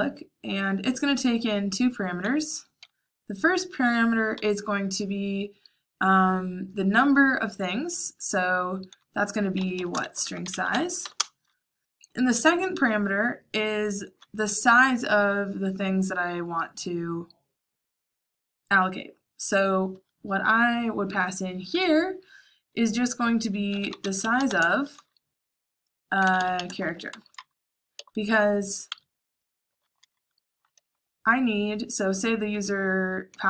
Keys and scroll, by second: 9.1-11.4 typing, 23.5-24.6 typing, 26.0-27.9 typing, 28.8 Escape, 29.7-31.6 typing, 33.2 k.